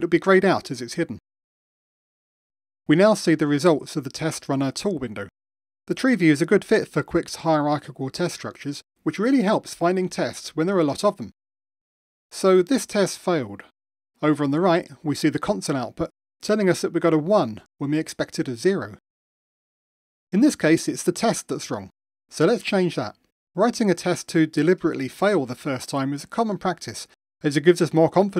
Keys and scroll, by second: 12.5 super+4, 27.8 ctrl+shift+r.